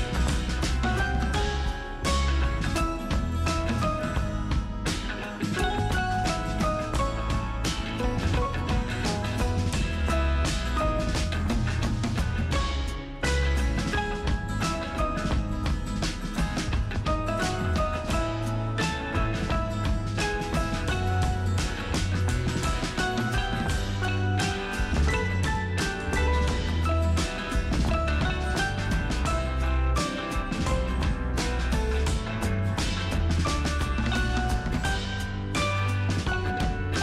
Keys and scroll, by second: 12.4 ctrl+space, 12.7 ctrl+space, 33.1 space, 34.2 space.